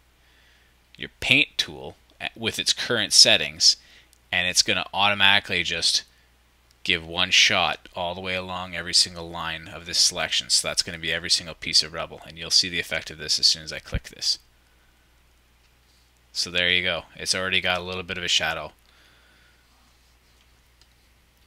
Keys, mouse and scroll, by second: 18.3 click, 18.5-18.8 shift+scroll down 1, 18.8-20.4 drag, 20.4 middle click.